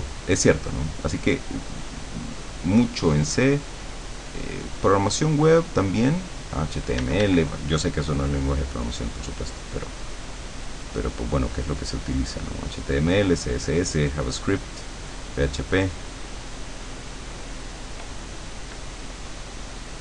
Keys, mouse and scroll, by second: 7.0 d, 8.7-12.9 drag, 13.1-17.8 drag, 19.5-20.0 drag.